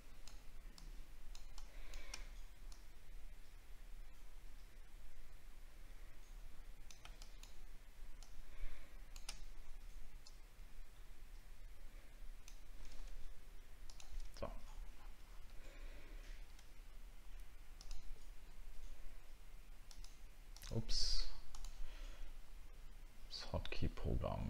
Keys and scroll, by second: 14.5-15.1 alt+scroll down 2, 16.0 alt+scroll down 1.